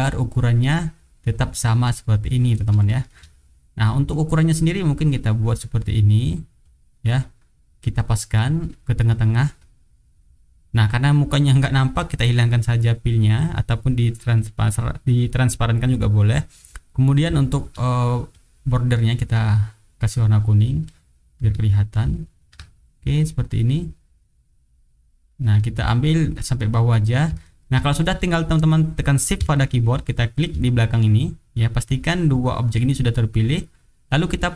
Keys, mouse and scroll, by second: 2.8 shift+right click, 3.4 shift+click, 4.8-6.5 drag, 6.6-8.1 drag, 8.5 click, 9.6 click, 12.6 click, 17.4 shift+click, 18.3 click, 18.9 middle click, 19.8 click, 20.2-21.1 drag, 21.6-22.6 ctrl+drag, 23.0-26.0 ctrl+drag, 26.9 click, 27.4 shift+right click, 28.0 shift+click, 30.2 shift+click.